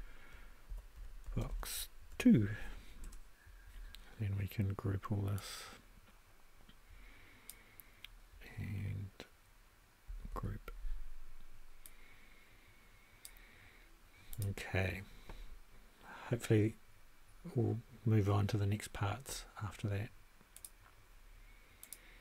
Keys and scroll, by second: 0.4-2.1 typing, 3.0 Return, 10.2 super+g.